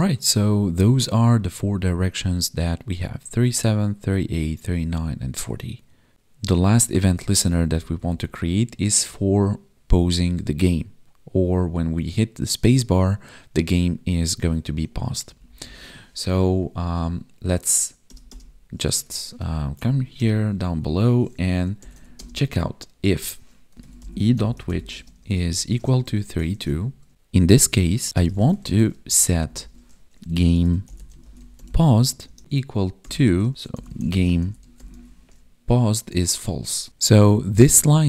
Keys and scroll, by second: 7.7 ctrl+Down, 9.2 Down, 9.4 space, 11.1 Right, 11.9 space, 12.9 Down, 13.5 Left, 13.6 space, 13.7 Up, 13.9 Left, 14.7 space, 15.0 Left, 15.3 Up, 15.4 Left, 15.5 Up, 15.6 Left, 15.7 space, 15.8 Left, 16.7 space, 17.0 Up, 17.2 Left, 17.5 Up, 19.0 ctrl+z, 19.8 Down, 22.1 space, 24.9 space, 25.6 space, 26.5 ctrl+s, 27.5 Right, 28.6 ctrl+s, 29.0 ctrl+Down, 31.9 Tab, 32.2 space, 33.3 space, 35.6 Tab, 36.3 ctrl+s, 37.5 ctrl+shift+Left.